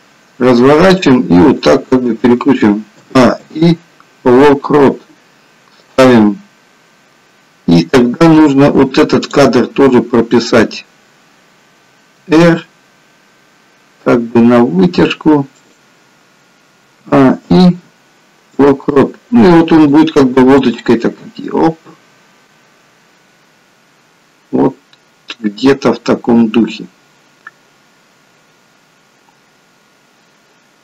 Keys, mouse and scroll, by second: 3.0 a, 3.3 i, 6.0 click, 9.0 click, 12.1 r, 16.9 a, 17.4 i, 20.0 click.